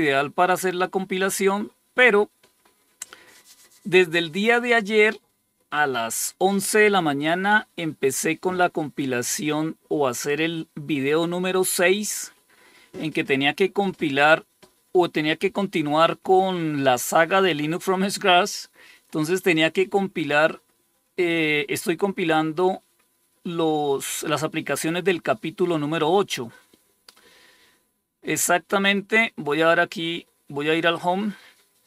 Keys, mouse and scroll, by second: 0.5 click, 28.7 click, 30.8-31.8 scroll down 3.